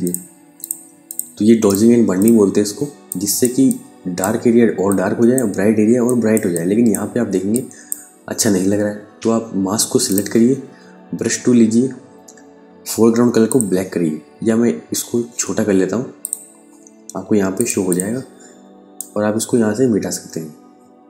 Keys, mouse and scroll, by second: 2.2 space, 2.5 click, 3.1 ctrl+click, 4.3 ctrl+click, 5.5 ctrl+click, 6.8 ctrl+space, 7.0 ctrl+click, 10.6 b, 12.9 click, 15.6 click.